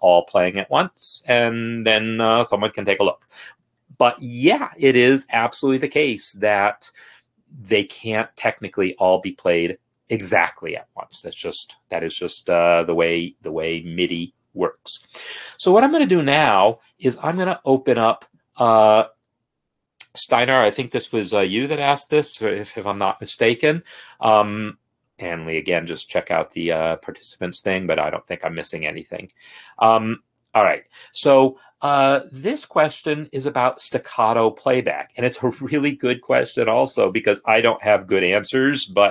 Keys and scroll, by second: 17.2 F4.